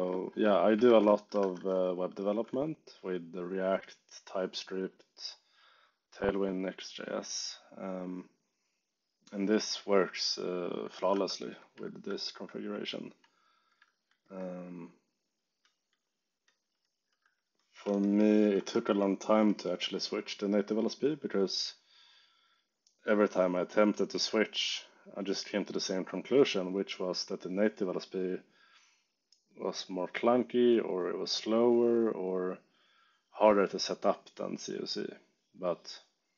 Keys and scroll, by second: 0.8 ctrl+shift+Tab, 1.1-2.3 typing, 2.4 Return, 11.0 Return, 11.9 ctrl+d, 13.8 ctrl+d, 14.6 j, 17.0 e, 17.9 shift+k, 18.5 Escape, 18.7 k, 19.3 j.